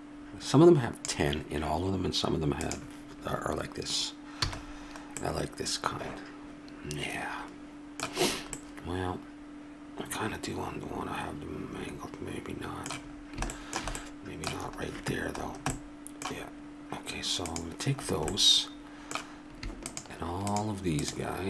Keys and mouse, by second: 0.1 click, 2.6-4.4 middle drag, 4.4 a, 5.2-7.6 middle drag, 8.3-10.9 middle drag, 13.2-15.9 middle drag, 17.5-21.4 drag.